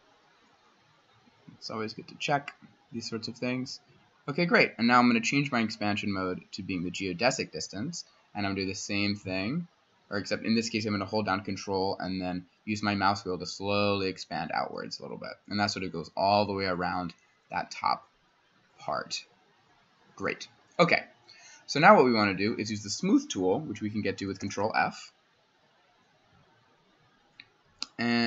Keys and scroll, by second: 24.4 ctrl+f.